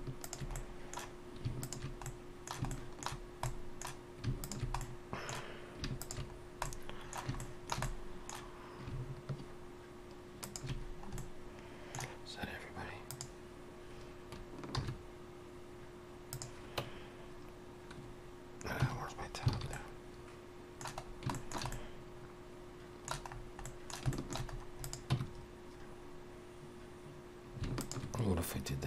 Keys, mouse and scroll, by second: 0.2 alt+shift+click, 0.5 middle click, 1.5 alt+shift+click, 2.0 middle click, 2.7 shift+middle click, 3.5 middle click, 4.4 alt+shift+click, 4.8 middle click, 6.0 alt+shift+click, 6.4 scroll down 2, 6.6 middle click, 7.4 shift+middle click, 7.8 middle click, 10.4 alt+shift+click, 10.8-13.1 scroll down 3, 11.2 middle click, 13.1 click, 14.8 shift+e, 18.8 Tab, 19.1-19.5 scroll down 3, 19.5 alt+a, 19.7 middle click, 21.0 scroll down 1, 21.3 shift+middle click, 21.7 middle click, 23.3-23.6 scroll up 2, 23.6 middle click, 24.1 shift+middle click, 24.5 scroll up 2, 24.8 click, 25.1 Tab, 27.8 alt+shift+click, 28.4-28.8 scroll down 1.